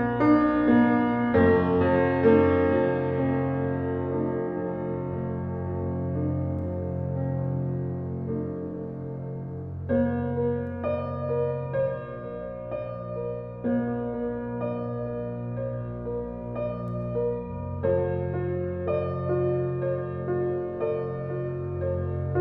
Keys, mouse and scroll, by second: 0.2 alt+right click, 1.7 ctrl+s, 2.7 alt+click, 3.1 alt+right click, 3.7 alt+click, 4.2 alt+middle click, 4.4 alt+right click, 4.8-13.3 alt+drag, 13.3 alt+right click, 13.6 alt+click, 13.8 alt+right click, 14.1 alt+-, 14.3 alt+middle click, 14.7 right click, 15.0 alt+click, 15.4 alt+middle click, 16.8 click.